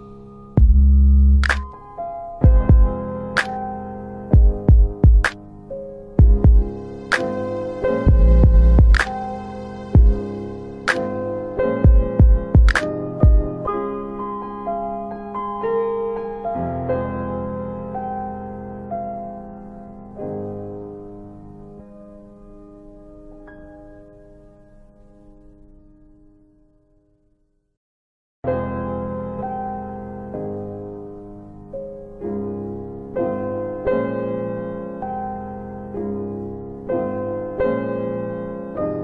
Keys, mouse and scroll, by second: 2.6 click, 3.1 alt+right click, 3.8 alt+click, 4.1 alt+click, 4.4 alt+right click, 4.8 alt+right click, 6.4 alt+right click, 6.5 alt+right click, 6.8 alt+right click, 7.3 alt+click, 7.7 alt+right click, 9.7 click, 13.6 click, 19.3 click, 20.5 click, 21.7 ctrl+z, 22.7 ctrl+z, 27.1 scroll up 1, 27.8 alt+click, 27.9 alt+click, 28.3 alt+middle click, 28.5 alt+middle click, 28.8 alt+right click, 28.9 alt+right click, 29.2 alt+middle click, 29.8 alt+right click, 30.0 alt+right click, 30.5 alt+right click, 30.9 alt+middle click, 31.2 alt+middle click, 31.2 alt+right click, 31.5 alt+right click, 32.2 alt+right click, 32.9 click, 33.4 click, 35.7 click, 36.7 alt+middle click, 37.2 alt+middle click, 37.6 click, 37.9 click, 38.5 click.